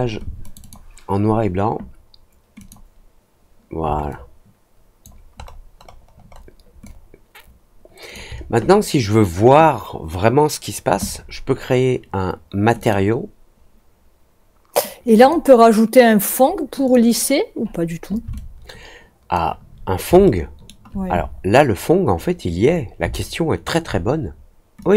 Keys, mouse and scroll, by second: 0.4 click, 0.5 click, 2.5 click, 4.0 alt+click, 5.3 alt+middle click, 5.8 alt+middle click, 6.2 alt+middle click, 6.8-8.1 alt+drag, 12.7 click, 15.0 click, 15.1 click, 16.8 click, 18.3-19.3 alt+drag, 20.2 alt+middle click, 21.2 alt+middle click, 21.4 alt+scroll down 1, 21.7-22.3 alt+scroll up 2, 23.1 alt+middle click, 24.7-24.9 drag.